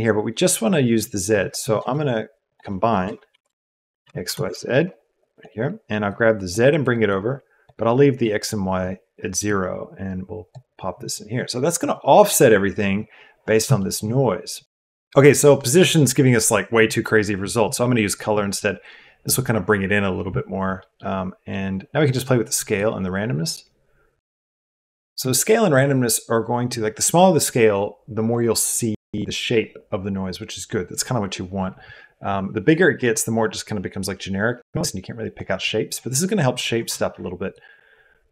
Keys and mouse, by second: 1.7 shift+a, 6.0-6.9 drag, 7.0-7.6 drag, 8.3 click, 9.4-10.6 drag, 10.6 middle click, 13.8 shift+click, 18.1-19.3 drag, 20.7 click, 22.7-24.1 drag, 24.1 shift+middle click, 24.4 shift+drag, 24.5 shift+middle click, 24.9 shift+middle click, 25.2 click, 25.2 middle click, 37.5-38.3 drag.